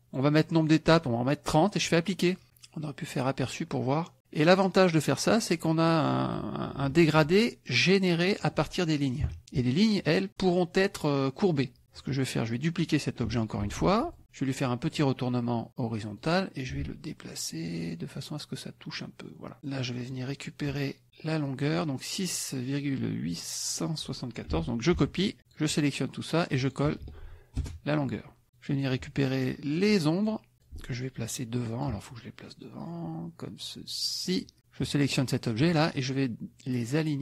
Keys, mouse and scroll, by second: 1.9 click, 4.4 click, 5.6 click, 6.3 click, 7.7-8.8 ctrl+drag, 9.2 Delete, 13.6 ctrl+d, 14.1 ctrl+click, 14.9 click, 16.2-19.6 drag, 20.0 click, 21.3 click, 24.9 ctrl+c, 25.3 ctrl+click, 26.5 click, 27.0 ctrl+v, 27.6 ctrl+Return, 28.5 click, 29.4-30.5 drag, 30.6-32.0 ctrl+drag, 34.3 click, 35.0 shift+click, 37.0 click.